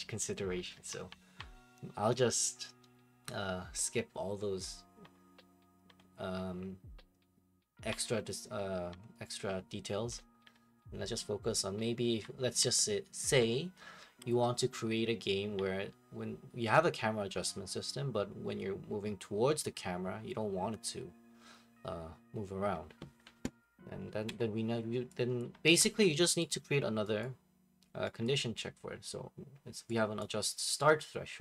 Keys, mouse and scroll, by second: 24.2 Escape, 25.4 click, 26.4 right click, 27.2 right click, 28.2 right click, 30.2 click.